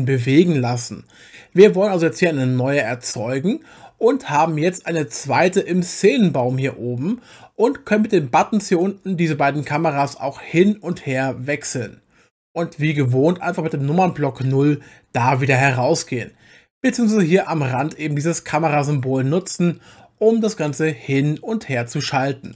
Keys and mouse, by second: 2.9 click, 8.7 click, 10.0 click, 10.9 click, 11.5 click, 15.3 KP_0, 18.2 click, 19.4 click.